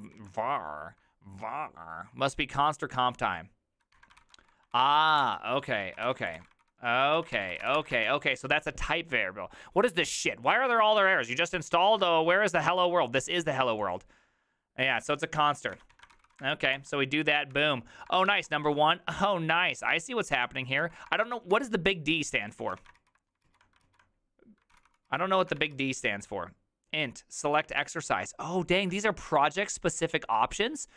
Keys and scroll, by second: 0.0 ctrl+a, 3.9-8.1 typing, 4.1 ctrl+c, 15.1 alt+{, 15.7 ctrl+a, 15.9 2, 16.1 ctrl+c, 16.2 ctrl+c, 16.4 Up, 16.7 Return, 17.5 Up, 18.1 BackSpace, 18.3 1, 18.4 Return, 20.3 Up, 20.8 ctrl+w, 21.1 BackSpace, 21.2 BackSpace, 21.5 Return, 22.6 ctrl+a, 22.8 [, 22.9 ctrl+u, 23.4 ctrl+u, 23.8 ctrl+u, 24.7 ctrl+c, 24.8 ctrl+c, 25.1 ctrl+u, 25.4 ctrl+a, 25.6 [, 25.7 ctrl+u.